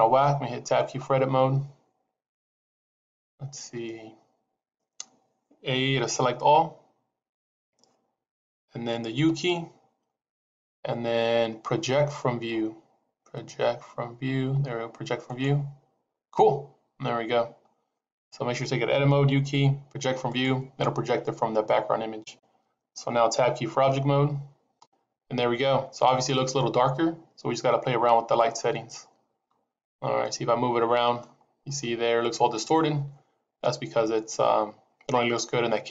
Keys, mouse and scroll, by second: 0.8 Tab, 2.1 scroll up 2, 3.4-3.7 scroll down 2, 6.3 a, 9.1 u, 19.2 u, 23.6 Tab, 25.1-25.7 scroll up 1, 28.4-29.8 scroll down 1, 30.1 middle click, 31.3 scroll down 2, 31.7 middle click.